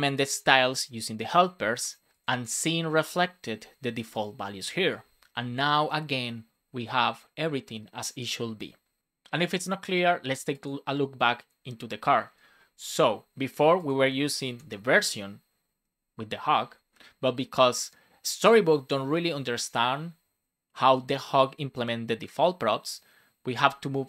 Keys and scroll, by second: 14.4 shift+super+Left.